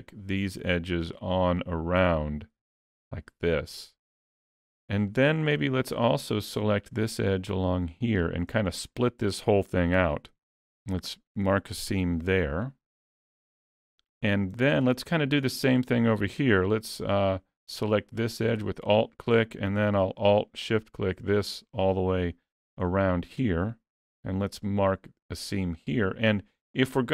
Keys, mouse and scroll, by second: 0.2 ctrl+click, 1.6 ctrl+click, 2.1 middle click, 3.1 ctrl+click, 3.7 middle click, 5.1 middle click, 6.2 shift+click, 6.8 shift+click, 8.4 shift+click, 8.6 middle click, 10.3 ctrl+e, 12.3 alt+a, 12.3 middle click, 13.7 middle click, 14.6 shift+middle click, 15.0-15.5 scroll up 2, 15.3 middle click, 17.1 alt+click, 18.3 middle click, 20.7 alt+shift+click, 21.3 middle click, 24.0 ctrl+e, 26.4-26.8 scroll down 2, 26.6 middle click.